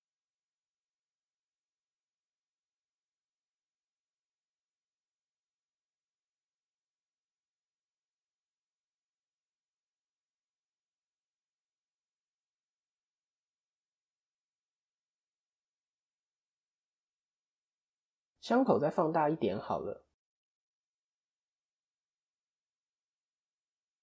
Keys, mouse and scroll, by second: 0.2 o, 1.2 click, 7.3 click, 9.7 ctrl+KP_3, 10.8-12.1 scroll up 5, 11.3 shift+middle click, 11.9 middle click, 14.6 middle click, 15.3 middle click, 15.8-16.3 scroll down 3, 16.3 shift+middle click, 17.5 Tab, 17.9 click, 18.6 KP_1, 19.3-19.8 scroll up 3, 19.8 shift+middle click, 20.4 Tab, 21.3 a, 22.5 s.